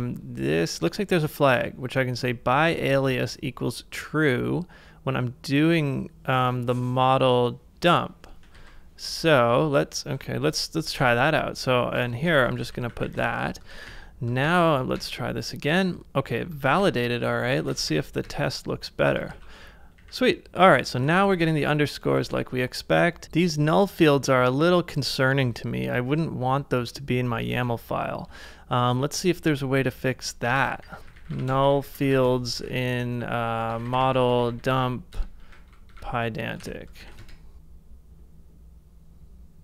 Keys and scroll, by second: 2.7 super+c, 8.6 super+c, 10.2 super+`, 11.0 super+Tab, 11.6-11.9 typing, 12.3 super+v, 12.7 ctrl+c, 12.9 ctrl+c, 13.0 ctrl+c, 13.2 ctrl+c, 13.8 ctrl+a, 13.8 ctrl+a, 14.5 Up, 15.0 Up, 16.7 ctrl+a, 17.7 ctrl+w, 19.2 ctrl+a, 19.3 ctrl+w, 19.3 ctrl+a, 20.0-22.1 typing, 22.2 ctrl+c, 23.2 super+`, 23.2 super+Tab, 27.5 super+Tab, 30.4-35.0 typing, 36.6 BackSpace, 37.1 Page_Down, 37.2 Return.